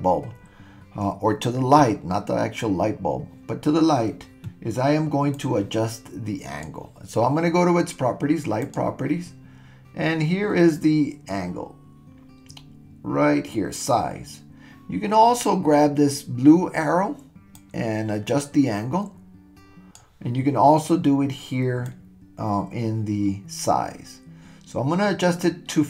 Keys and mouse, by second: 5.3-6.7 drag, 8.7 click, 17.6-20.0 drag, 22.0-25.8 drag.